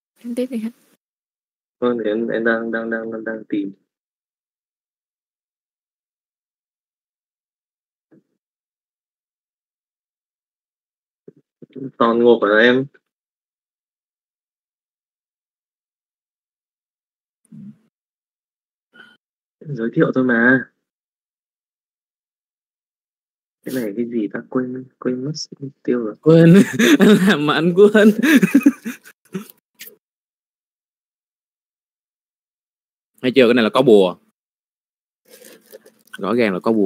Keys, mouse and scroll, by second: 3.1 click, 3.8 middle click, 5.3-8.1 middle drag, 8.4 middle click, 9.6 KP_Divide, 11.3 click, 12.1 shift+middle click, 12.9 drag, 13.3 z, 13.8 z, 14.3-16.5 middle drag, 17.4-19.4 drag, 20.4 click, 22.8 middle click, 23.7 middle click, 24.5 middle click, 25.0 middle click, 26.2 click, 27.5 middle click, 27.9 shift+middle click, 28.2 middle click, 31.0 click, 32.0 middle click, 32.5 middle click, 32.9 shift+middle click, 33.1 middle click, 34.2 Tab, 34.5 middle click, 35.1 a, 35.5 a.